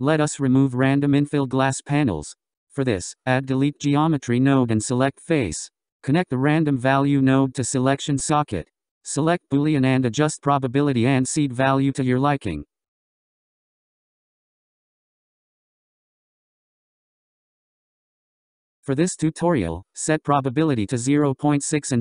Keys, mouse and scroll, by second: 0.5 shift+a, 5.2-6.5 scroll up 6, 6.5 shift+a, 11.1-13.5 drag, 14.1-18.2 drag, 18.2-21.6 scroll up 10, 21.6 click.